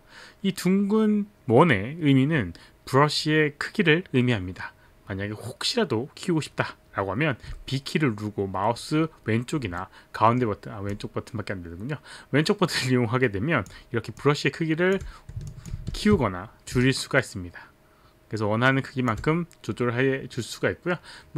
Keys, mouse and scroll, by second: 7.5 b, 9.8 middle click, 10.9 click, 14.2 click, 15.5 alt+click, 15.9 ctrl+z, 16.7 b, 16.8 click.